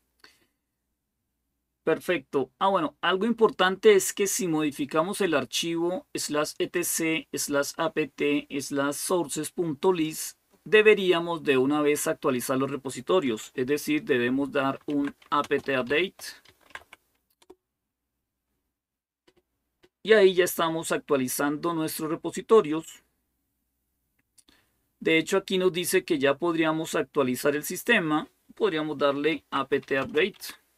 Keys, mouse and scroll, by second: 9.6-14.6 drag, 14.3-17.2 typing, 28.9-30.7 typing.